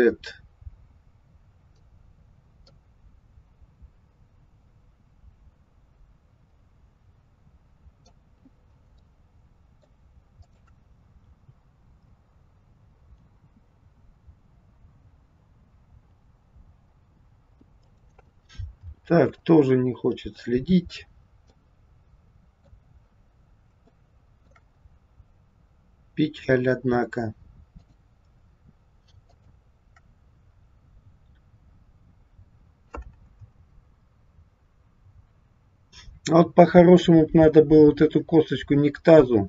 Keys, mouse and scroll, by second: 2.6 click, 8.9 middle click, 10.3 click, 11.3 g, 19.4 ctrl+z, 21.4 middle click, 23.3 scroll up 1, 23.9 shift+middle click, 27.7 click, 29.3 shift+click.